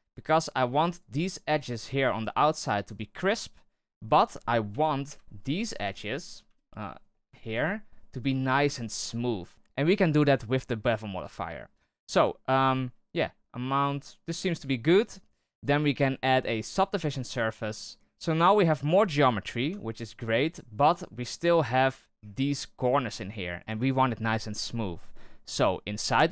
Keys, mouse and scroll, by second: 3.8 middle click, 4.6 KP_3, 5.0 KP_1, 5.6-6.4 scroll down 11, 6.4 KP_3, 7.0 scroll up 1, 7.3 shift+middle drag, 7.6-9.5 scroll up 1, 9.5-10.9 middle drag, 10.9-11.3 scroll up 1, 11.3-12.7 shift+middle drag, 12.7-17.5 shift+drag, 17.5-17.9 scroll down 1, 18.5-19.5 middle drag, 19.5 KP_3.